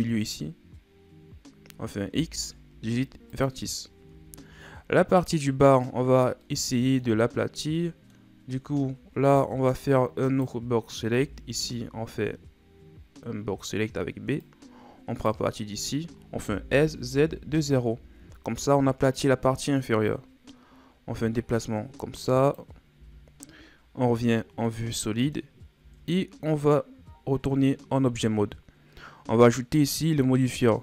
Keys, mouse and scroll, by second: 2.2 x, 4.3-4.8 scroll down 3, 4.8-7.8 scroll up 1, 10.3 right click, 11.2 b, 16.5 s, 20.1-23.0 drag, 23.0 z, 24.7 middle click, 25.5-25.8 scroll up 1, 25.8 Tab, 29.8-30.8 drag.